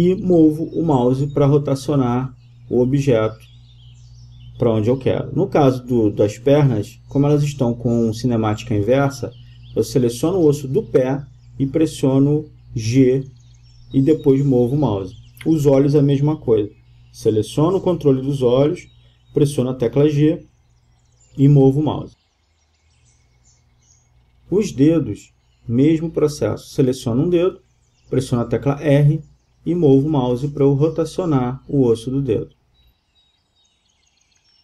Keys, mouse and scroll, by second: 0.8-2.3 right drag, 1.7 r, 6.3-9.2 right drag, 8.6 g, 13.3-14.9 right drag, 14.3 g, 17.9-19.5 drag, 18.8 g, 25.1 click, 25.1-25.8 middle drag, 25.9-27.6 middle drag, 28.5 r, 33.8-34.6 drag.